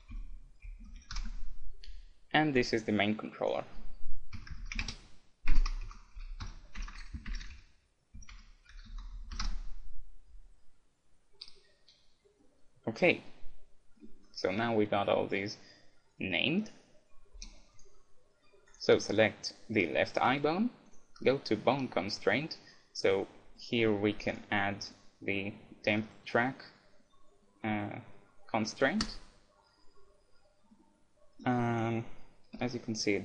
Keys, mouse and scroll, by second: 0.8 l, 2.5-4.4 right drag, 3.4-5.2 drag, 6.9 BackSpace, 7.4 BackSpace, 9.2 l, 12.0-15.2 middle drag, 17.4 g, 18.3 middle click, 18.7-20.5 right drag, 19.9 middle click, 20.9-22.6 drag, 24.3-26.0 drag, 26.1 click, 30.7-32.3 middle drag, 31.7-33.2 right drag, 32.7 g.